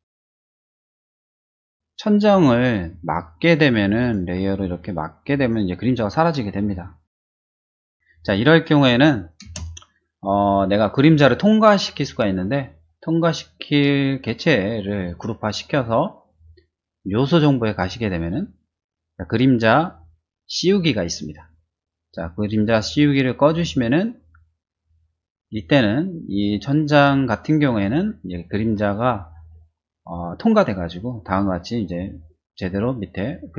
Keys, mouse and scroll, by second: 1.7 click, 4.0 click, 5.3 click, 9.4 space, 10.8 click, 17.2 click, 23.8 click.